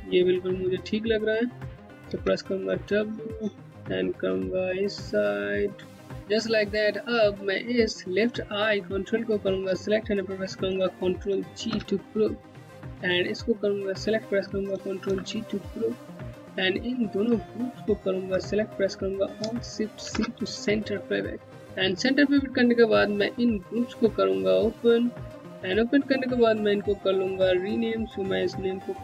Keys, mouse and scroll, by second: 1.6 middle click, 3.2 w, 3.3 click, 8.3 click, 11.1 ctrl+g, 12.7 click, 14.6 ctrl+g, 16.6 click, 17.6 ctrl+click, 19.6 alt+shift+c, 21.6 z, 23.2 click, 24.7-25.8 scroll down 1, 25.8 click.